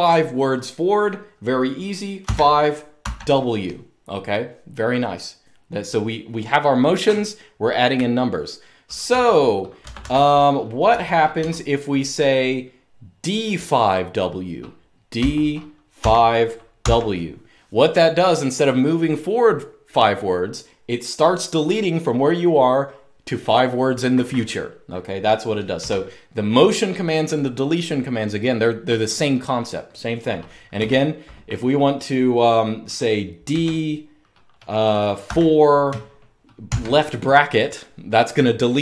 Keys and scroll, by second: 1.9-2.7 typing, 8.8 typing, 9.7 Escape, 9.8 Escape, 10.4-11.6 typing, 14.9-16.5 typing, 25.5 u, 30.5 k, 33.2 d, 34.7-36.4 typing.